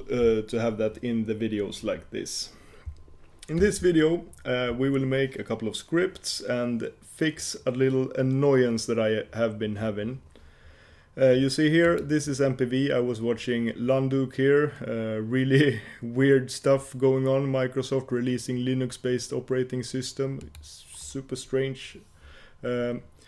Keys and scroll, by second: 3.9 super+1.